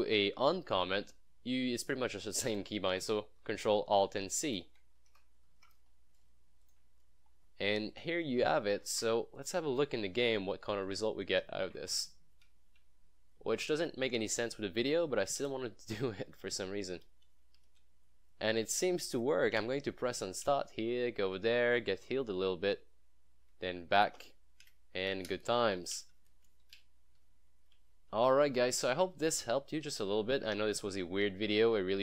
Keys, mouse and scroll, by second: 1.8-2.8 drag, 5.2 ctrl+alt+c, 6.9 click, 7.0 scroll up 1, 7.3 scroll down 1, 8.3 click, 8.8 ctrl+s, 9.4 click, 9.5 click.